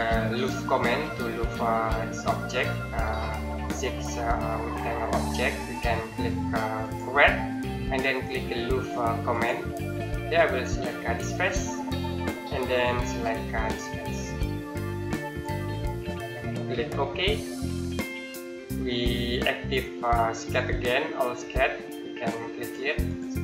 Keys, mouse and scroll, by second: 8.0 click, 10.0 scroll down 1, 11.3 click, 12.0-12.7 scroll up 1, 12.8-15.1 scroll down 1, 15.1 click, 15.8 scroll down 1, 16.1-17.4 scroll up 1, 17.4 click, 18.0 middle click, 20.2 click.